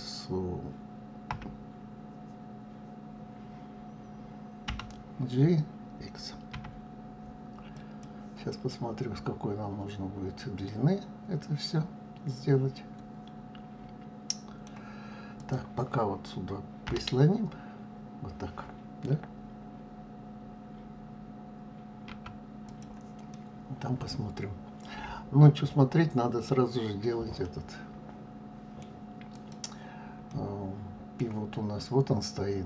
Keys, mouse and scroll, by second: 1.3 x, 4.7 g, 8.7-11.7 middle drag, 15.4 click, 16.9 g, 23.3-26.4 middle drag, 27.4-29.3 middle drag, 29.3 click, 30.3-32.6 middle drag.